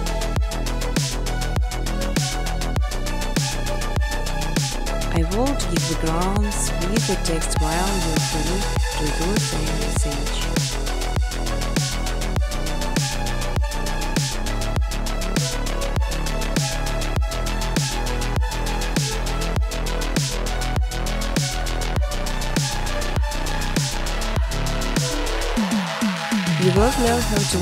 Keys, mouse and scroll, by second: 0.5 click, 1.4-4.0 typing, 5.7-7.2 typing, 6.7 click, 6.9 middle click, 8.2 click, 8.2-8.9 typing, 8.5 middle click, 8.5 middle click, 8.9-9.4 scroll, 9.4 click, 9.5 scroll, 9.7 click, 11.3 click, 12.9 middle click, 13.4-13.7 scroll, 13.7 click, 14.1 scroll, 14.2 middle click, 14.2 middle click, 14.6 right click, 16.1 click, 16.1 scroll, 17.0-19.2 typing, 20.6 click, 21.8 click, 23.1 click, 24.1 typing, 24.5 click, 24.8 click, 26.0 click.